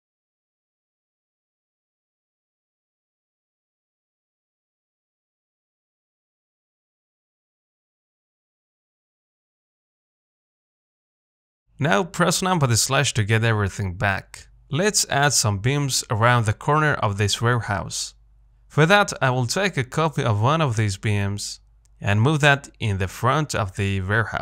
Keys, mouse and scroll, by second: 1.4-4.1 middle drag, 5.0 s, 7.7 Tab, 7.9 middle click, 8.1-8.5 scroll down 1, 8.5 middle click, 8.7 scroll up 2, 8.9-12.7 shift+middle drag, 12.7 KP_Divide, 13.6 middle click, 14.0-14.8 scroll up 1, 14.8-15.6 scroll down 4, 15.6 shift+middle click, 16.3-17.1 scroll up 2, 17.1 scroll up 1, 17.1-18.8 shift+middle drag, 18.8-19.4 scroll down 1, 19.4 shift+middle click, 19.6-20.3 scroll up 2, 20.3-21.6 middle drag, 21.6 click, 21.8 scroll down 2, 22.2 shift+middle click, 23.0 shift+middle click, 23.8 shift+d.